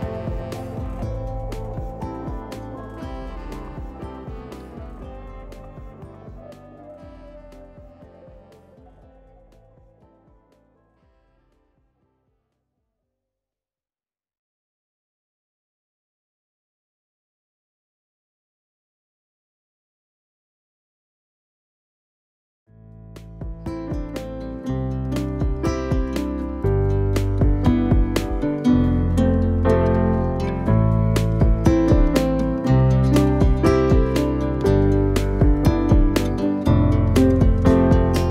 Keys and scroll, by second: 0.3-1.5 typing, 2.0 Return, 4.0 0, 4.2 Return, 13.9 F10, 20.3 u, 23.6 t, 26.7 t, 30.3 s, 33.1-34.0 typing.